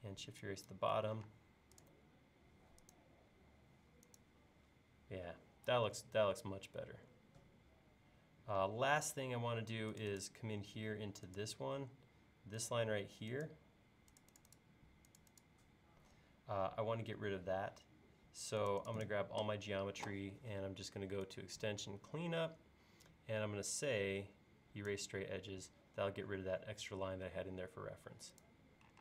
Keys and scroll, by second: 1.3 space.